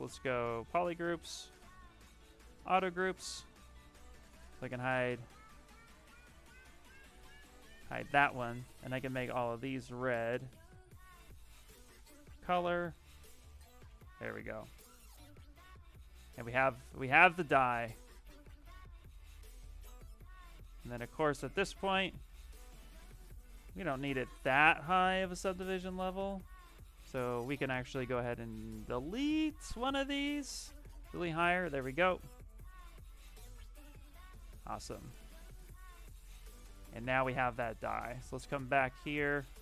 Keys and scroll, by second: 5.2 ctrl+z, 6.2 ctrl+z, 6.9 ctrl+shift+z, 23.6 shift+d, 32.8 d, 33.4 shift+d.